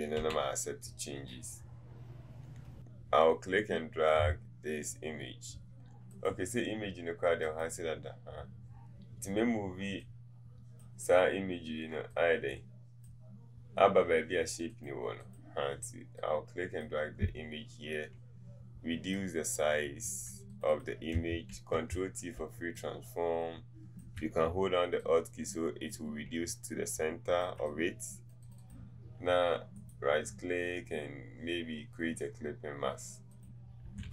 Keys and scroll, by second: 0.3 v.